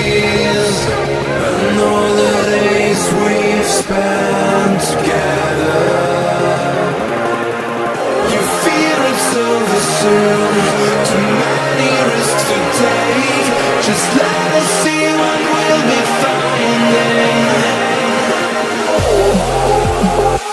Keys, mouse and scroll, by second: 1.2 right click, 2.9 click, 5.6 F10, 7.5-10.8 typing, 11.5 click, 12.1 shift+click, 12.5 click, 15.7 F2, 16.2-17.4 typing, 19.4 typing, 19.7 Return, 20.4 click, 20.4 F10.